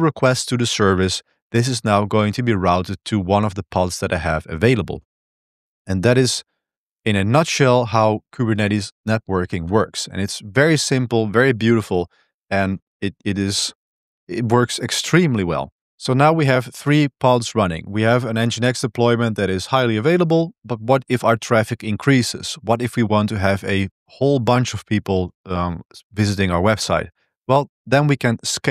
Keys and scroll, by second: 8.8 Return, 8.8 ctrl+=, 8.8 ctrl+b, 8.8 super+3, 9.5 ctrl+b, 12.9 ctrl+c, 13.5 ctrl+c, 15.0 ctrl+b, 15.3 1.